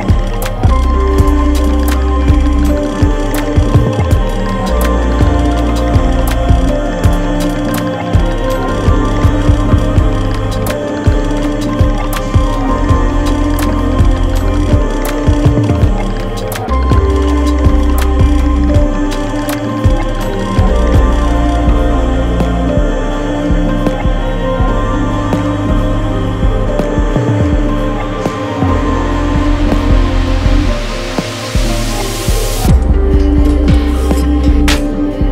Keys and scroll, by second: 0.2 super+-, 0.9 super+y, 1.3 super+y, 1.7 v, 1.8 space, 4.2 super+3, 5.0 super+3, 5.8 super+3, 6.5 alt+super+3, 8.2 super+3, 9.1 alt+super+3, 13.6 super+y, 14.6 super+y, 15.4 super+z, 19.6 v, 27.1 shift+super+[, 28.2 i, 29.0 v, 29.2 v, 29.4 v, 32.1 super+z.